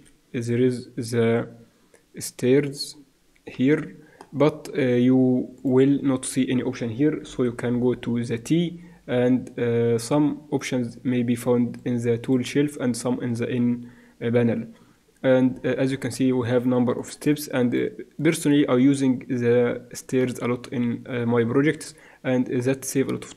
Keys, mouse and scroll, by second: 3.7-5.6 middle drag, 5.6-7.5 drag, 7.2 n, 7.7 t, 9.9-13.6 drag, 15.4-16.9 middle drag, 16.9-20.0 drag, 20.0-21.9 middle drag.